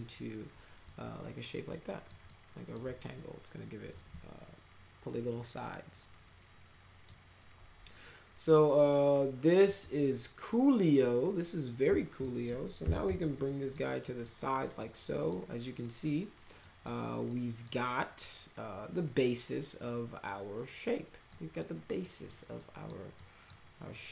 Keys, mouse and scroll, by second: 0.8-2.0 alt+middle drag, 2.2 alt+middle click, 3.9-7.0 drag, 9.6-11.8 drag, 12.2 middle click, 12.5-13.5 typing, 13.4 middle click, 14.0 middle click, 14.6 middle click, 15.0 middle click, 16.6 middle click, 17.2 middle click, 21.3 middle click, 22.0 middle click, 22.5 middle click, 23.1 middle drag.